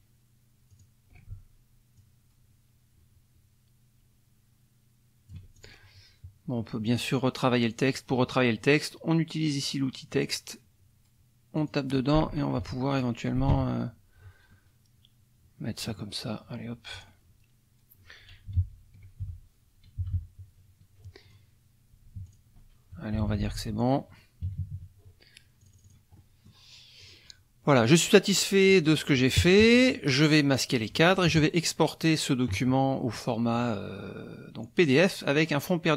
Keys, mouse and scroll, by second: 0.7 shift+click, 2.0-5.8 ctrl+drag, 6.9 click, 10.1 click, 11.6 click, 12.6 Right, 13.4 space, 13.5 Delete, 16.9 click, 18.6 shift+Down, 20.0 Down, 22.3 shift+click, 23.1 Up, 24.4 KP_Subtract, 25.6 click, 26.2 click, 27.0 click, 29.3 click, 30.8 click, 31.1 click, 32.0 click, 33.5 click.